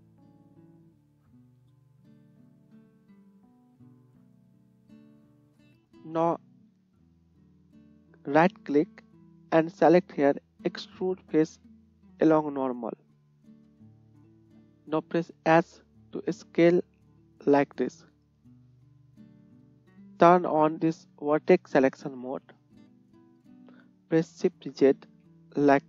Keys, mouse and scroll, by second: 0.1 shift+middle click, 0.2 shift+click, 0.6 shift+middle click, 0.7-2.2 shift+drag, 1.7 shift+middle click, 1.7 shift+right click, 2.3-22.0 shift+drag, 2.8 shift+middle click, 2.8 shift+right click, 15.6 s, 19.7 KP_1, 22.5 middle click, 24.3-25.3 shift+middle drag, 25.1 shift+z.